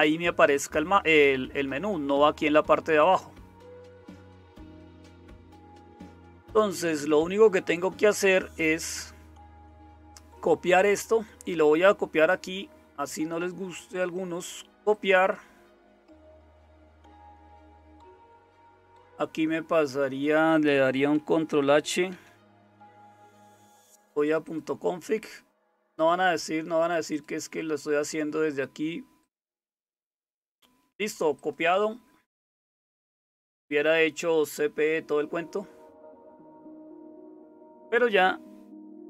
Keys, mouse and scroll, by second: 22.1 ctrl+h.